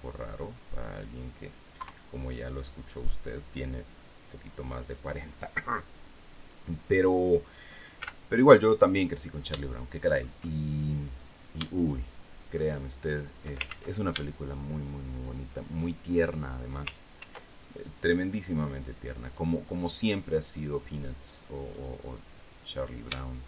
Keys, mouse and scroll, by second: 1.5 click, 2.3 KP_3, 8.6 z, 10.3 shift+middle click, 11.6 middle click, 12.3 shift+middle click, 13.2 shift+right click, 14.2 ctrl+shift+z, 14.9 shift+middle click, 17.7 ctrl+r, 18.3 ctrl+click, 18.6-20.3 middle drag, 20.3 click, 20.6-22.3 middle drag, 22.3 click, 22.6 middle click.